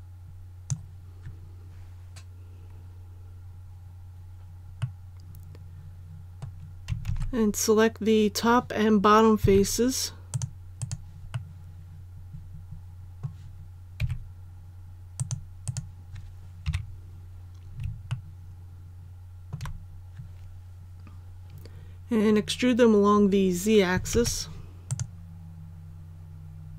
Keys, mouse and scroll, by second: 4.8-6.7 middle drag, 7.0 alt+a, 8.5-9.4 scroll up 1, 9.4-10.3 scroll up 1, 10.3 click, 10.7 right click, 11.3-13.7 middle drag, 13.9 c, 15.1 click, 15.6 right click, 16.6 KP_1, 18.0 shift+middle click, 24.1 alt+e, 24.8 click.